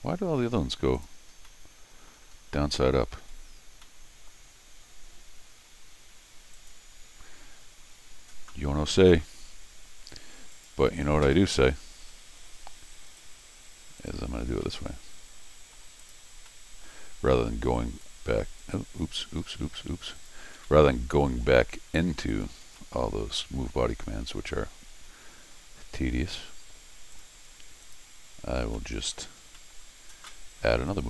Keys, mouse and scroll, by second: 1.0 click, 1.4 scroll up 2, 1.5 middle click, 2.4 scroll down 2, 2.5 middle click, 3.4 scroll down 2, 3.8-7.9 middle drag, 6.5 click, 10.5 click, 12.2 middle click, 13.1 click, 14.0 click, 15.2 middle click, 16.0 click, 16.5 middle click, 17.8 click, 18.6 click, 20.2 click, 20.6 scroll down 1, 20.6 middle click, 22.3 click, 22.8-25.3 middle drag, 25.6 scroll up 1, 27.1 click, 27.8 click, 28.7 middle click, 29.4-31.0 middle drag, 30.9 click.